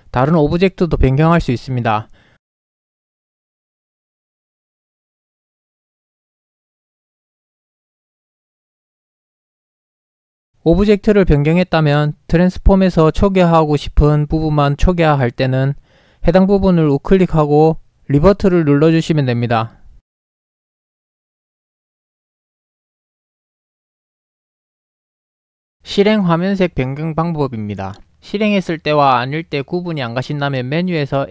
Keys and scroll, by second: 3.3 f, 8.2 ctrl+shift+f, 11.8 ctrl+shift+f, 21.1 0.